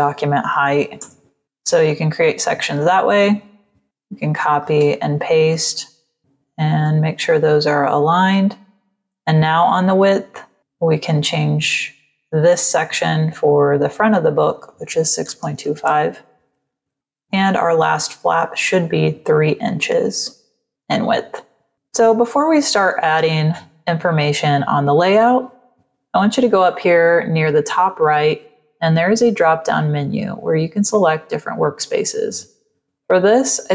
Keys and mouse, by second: 0.2 KP_7, 0.9 Return, 1.6 space, 1.6 click, 3.8 ctrl+c, 4.5 ctrl+v, 6.1 shift+click, 12.4 click, 15.1 KP_6, 15.3 KP_2, 15.7 Return, 16.9 click, 21.7 click, 28.0 click.